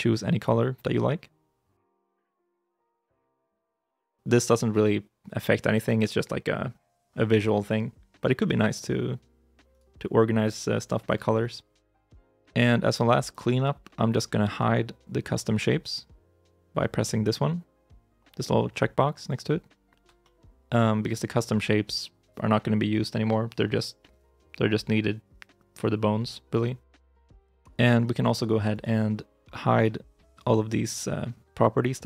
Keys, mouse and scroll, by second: 3.0 right click, 7.4 right click, 9.5 right click, 13.4 shift+middle click, 13.8 middle click, 20.1 shift+middle click, 23.4 middle click, 27.3 shift+middle click, 28.6 right click.